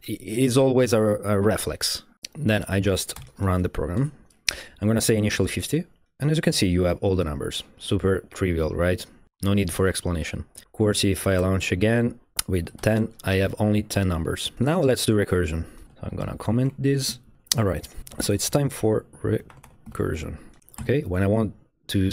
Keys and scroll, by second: 2.1 shift+z, 3.2 r, 3.8 Right, 4.0 Return, 5.0-5.9 typing, 11.4-13.3 typing, 11.8 Tab, 12.0 Return, 14.5 Right, 14.5 Return, 15.9 Up, 15.9-20.6 typing, 20.8 Escape.